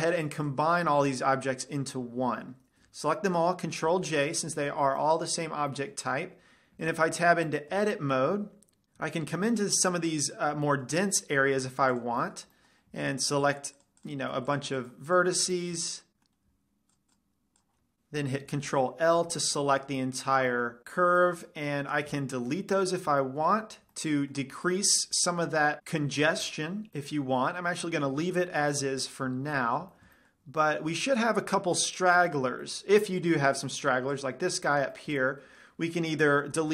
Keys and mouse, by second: 0.7 a, 0.9 b, 1.4 click, 4.4 ctrl+j, 5.5-8.1 middle drag, 7.6 Tab, 9.9 middle click, 11.4 middle click, 11.7 middle click, 12.8 middle click, 16.2 middle click, 16.6 click, 17.2-19.2 drag, 19.2 ctrl+l, 20.3 middle click, 21.6-23.6 middle drag, 22.6 x, 23.8-25.8 middle drag, 28.8 ctrl+z, 29.9 a, 30.5-31.9 middle drag, 32.3 middle click, 32.6 click, 35.8 click, 36.5-36.7 middle drag.